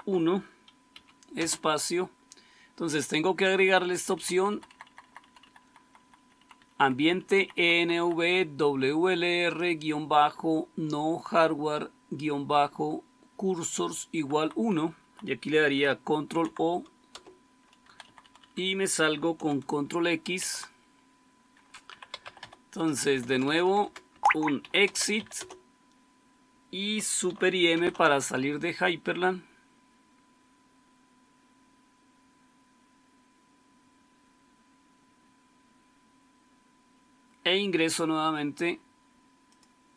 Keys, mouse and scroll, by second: 0.8-1.3 typing, 3.3-5.4 typing, 4.6 Left, 5.5 Left, 5.7 Left, 5.9 Left, 6.1 Left, 6.2 Left, 6.5 Left, 6.6 Left, 6.8 Left, 7.0 Left, 7.0-7.9 typing, 7.3 Left, 7.5 Left, 7.7 Left, 7.9 Left, 8.1 Left, 14.0 Right, 14.2 Right, 14.5 Right, 14.9 Right, 16.3 ctrl+o, 17.1 Return, 17.7 Down, 17.9 Down, 18.1 Down, 18.3 Down, 20.4 ctrl+x, 21.6-25.6 typing, 24.0 Caps_Lock, 27.7 super+m.